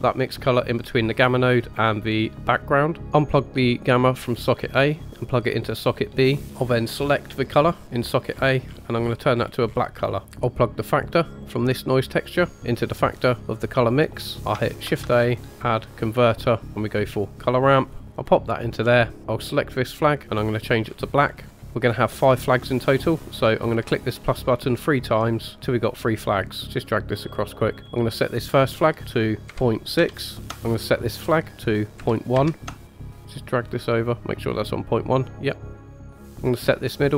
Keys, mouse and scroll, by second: 0.0-1.8 drag, 3.0-5.4 drag, 3.0 middle click, 3.0 scroll up 2, 7.4 click, 10.2 middle click, 10.2-11.3 scroll down 1, 11.4 click, 12.1-14.1 drag, 14.3 scroll down 3, 14.8 shift+a, 18.8-19.2 scroll up 1, 19.2 click, 19.9 click, 20.3 click, 21.6 ctrl+z, 21.6 click, 24.1 click, 25.3 click, 26.6 click, 27.7 click, 28.9-30.5 drag, 30.8 click, 31.5-32.7 drag, 33.1 click, 34.4 click, 35.4 scroll up 1, 35.6 click, 36.3 ctrl+z, 36.4 click.